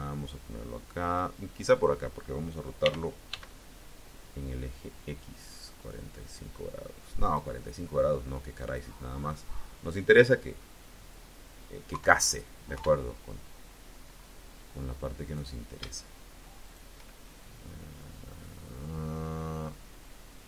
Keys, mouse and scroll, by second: 2.7 r, 3.1 x, 7.1 click, 8.4-10.2 drag, 11.7 KP_3, 12.6 KP_1, 13.9-14.2 scroll up 1, 15.1 click, 16.5 shift+click, 17.3-20.4 shift+drag.